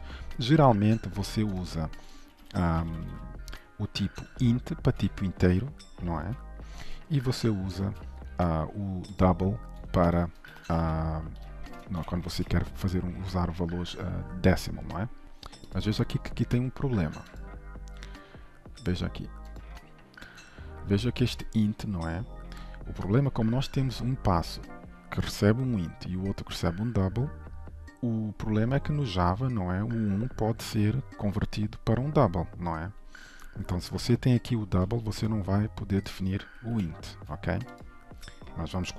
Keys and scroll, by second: 5.5 ctrl+Delete, 6.3 ctrl+z, 7.3 ctrl+/, 7.8 ctrl+s, 12.1 ctrl+/, 12.3 ctrl+s, 17.4 ctrl+b, 36.8 ctrl+/, 37.1 ctrl+s.